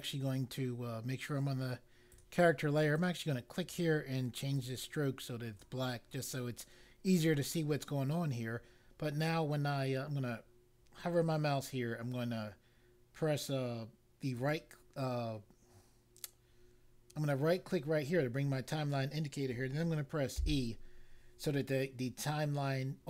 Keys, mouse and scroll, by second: 2.1 click, 2.9 click, 4.5 click, 14.3 right click, 20.3 e.